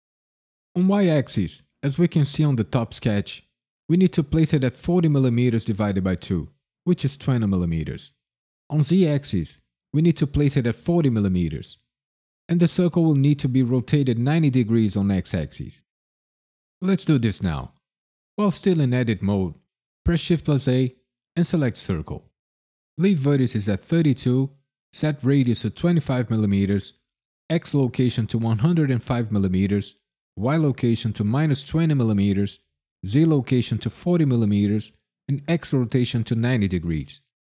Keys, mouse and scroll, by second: 20.0 shift+a, 24.0 click, 26.9 click.